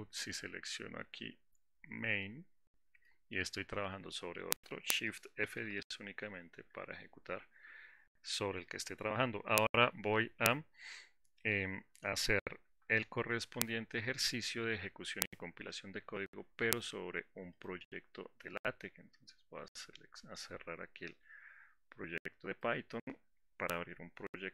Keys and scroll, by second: 5.8 shift+F10, 13.2 alt+4.